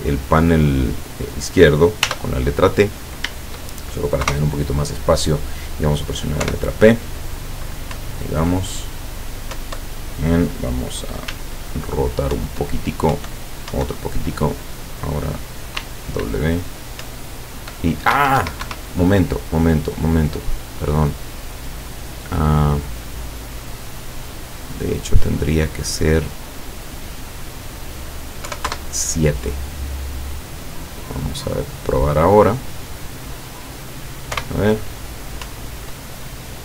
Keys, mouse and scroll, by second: 2.1 t, 4.2 KP_0, 6.5 p, 8.0 Up, 9.7 Up, 12.4 Up, 13.2 Up, 15.8 w, 17.0 Up, 18.3 Escape, 22.1 click, 24.0-25.5 drag, 26.3-27.2 drag, 27.6 click, 28.5 KP_7, 28.7 KP_Enter, 32.2-33.7 drag, 34.4 p, 35.5 Up.